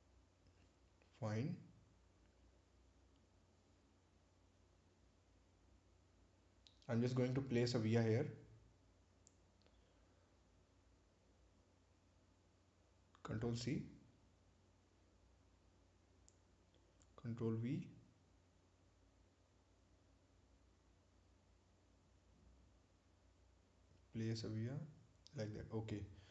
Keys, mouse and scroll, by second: 4.3 right click, 6.8 ctrl+v, 9.9 right click, 13.2 click, 14.5 ctrl+c, 15.2 click, 17.5 click, 23.3 click, 23.5 ctrl+v, 25.4 click.